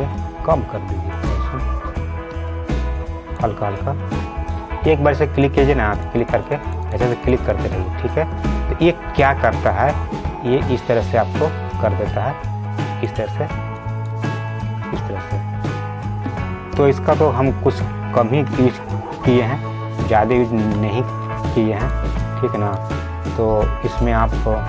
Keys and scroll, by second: 5.1 ctrl+z, 9.1 ctrl+z, 19.0 ctrl+alt+z.